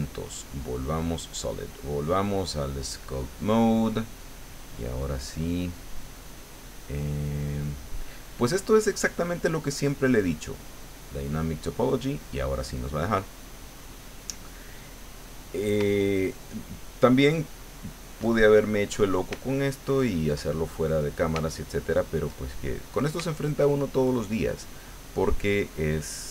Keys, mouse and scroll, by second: 0.0 click, 0.8 click, 1.9 click, 3.2 click, 4.7-9.6 drag, 10.8 click, 16.0-17.2 shift+middle drag, 17.4 shift+middle click, 18.3-19.4 shift+middle drag, 19.4-21.4 shift+middle drag, 21.5 shift+middle click, 22.6 shift+middle click, 23.3 shift+middle click, 25.7 click.